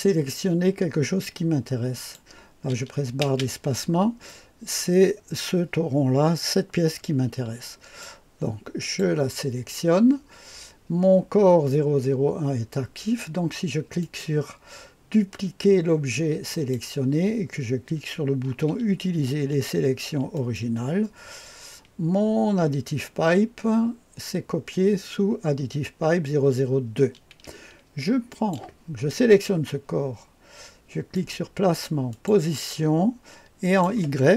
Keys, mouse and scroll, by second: 1.9 click, 4.2-8.0 drag, 8.7 click, 13.9 click, 16.4 click, 20.3 click, 28.2 click, 31.0 click, 32.0 click, 33.5 click.